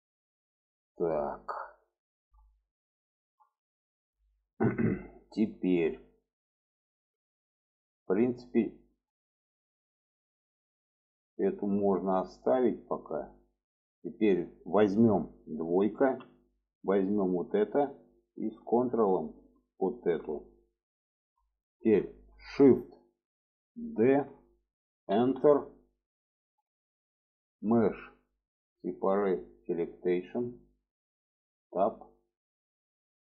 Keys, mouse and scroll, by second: 1.9 shift+middle click, 2.2 middle click, 2.9 shift+middle click, 3.3 alt+middle click, 4.1 shift+middle click, 5.1 shift+middle click, 5.7 middle click, 6.7 shift+middle click, 7.8-9.2 middle drag, 9.8-13.4 middle drag, 13.9 shift+middle click, 15.8 2, 16.6 click, 17.3 middle click, 19.5 ctrl+click, 20.4 alt+middle click, 21.4 shift+middle click, 23.7 shift+d, 27.4-29.8 drag, 31.5 Tab.